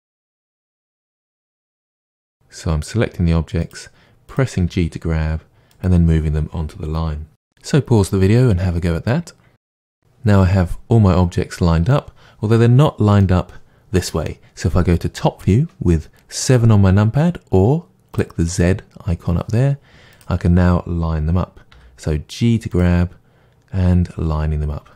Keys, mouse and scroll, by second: 0.3 click, 0.9 g, 2.0 click, 2.1 g, 3.7 click, 4.5 g, 5.9 click, 9.3-18.1 middle drag, 18.1 click, 20.1 click, 21.7 g, 24.2 click.